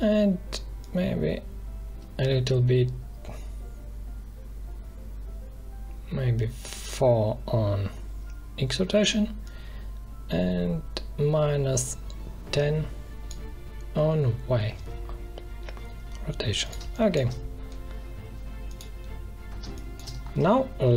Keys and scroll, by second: 16.7 space, 19.5 space.